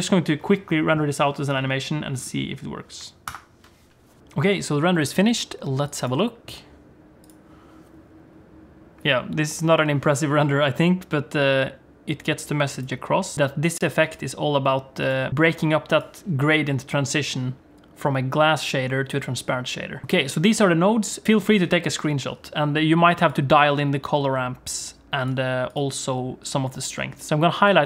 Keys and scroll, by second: 3.3 ctrl+F12, 4.2 F11.